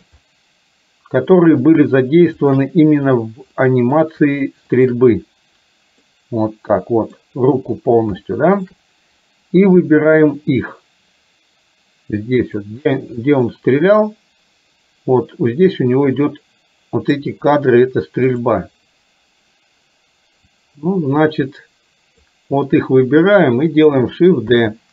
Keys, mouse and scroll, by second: 0.3-1.8 middle drag, 2.4 shift+click, 3.7 middle drag, 4.9 shift+click, 6.2-7.2 middle drag, 8.3 shift+middle click, 12.5 click, 13.3-17.3 drag, 18.4 click, 20.5-22.4 drag, 24.7 shift+d.